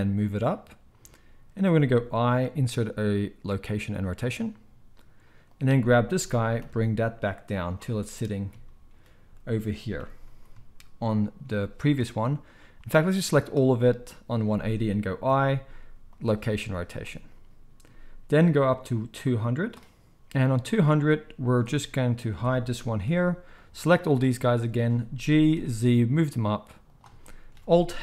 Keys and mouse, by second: 2.3 i, 5.5 click, 6.2 g, 8.6-13.2 middle drag, 10.0 g, 11.5 z, 13.2-21.5 drag, 16.5 z, 21.5-22.1 middle drag, 22.1 click, 22.3-23.5 middle drag, 23.1 h, 23.5-26.9 drag, 25.2 g, 26.9-28.0 shift+middle drag.